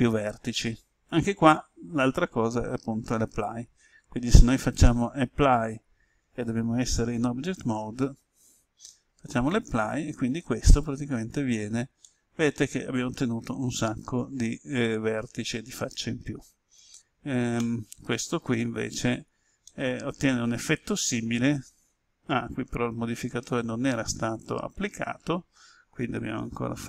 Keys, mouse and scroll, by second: 7.1 Tab, 9.3-10.3 drag, 10.6 right click, 11.1 Tab, 12.0-16.3 middle drag, 17.5 Tab, 18.1 right click, 18.5 Tab, 19.6-22.3 middle drag, 26.7 Tab.